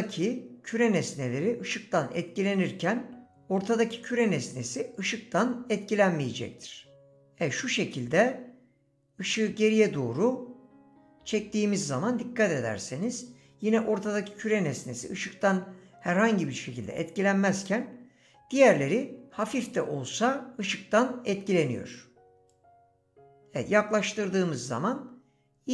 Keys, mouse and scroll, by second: 7.6 click.